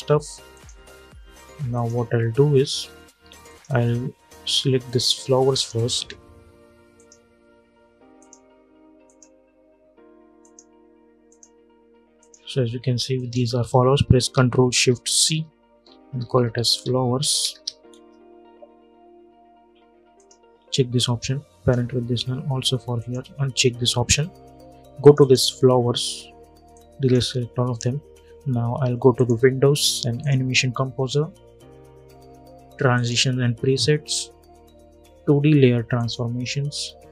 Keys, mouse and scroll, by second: 0.4 click, 1.9-2.4 scroll up 1, 3.2 click, 4.6 shift+click, 12.9 shift+click, 14.4 ctrl+shift+c, 15.6-17.8 typing, 19.9 click, 21.6 scroll down 1, 22.7 click, 23.4 scroll up 1, 23.5-24.3 scroll down 1, 24.3-24.7 scroll up 1, 24.7-28.9 drag, 32.6 click, 35.7 click.